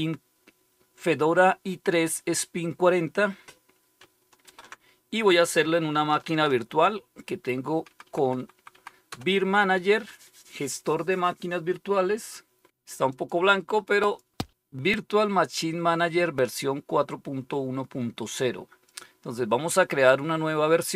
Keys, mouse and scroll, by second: 4.3 super+3, 8.0 alt+super+d, 8.1 Down, 8.3 Down, 9.0 Down, 13.0 click, 13.9 click, 18.1 click, 18.8 click.